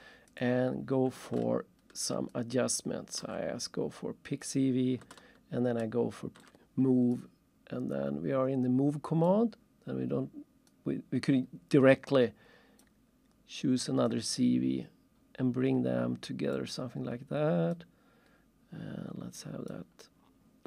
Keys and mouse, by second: 0.3 click, 1.4 ctrl+shift+click, 2.3 ctrl+shift+click, 5.1 ctrl+shift+middle click, 7.1 click, 9.2 click, 10.7 click, 12.8 click, 16.5 click, 19.7 click.